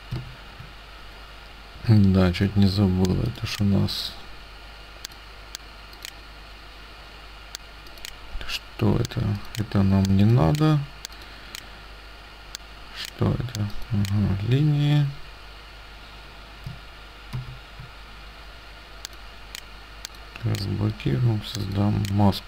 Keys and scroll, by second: 17.4 ctrl+f.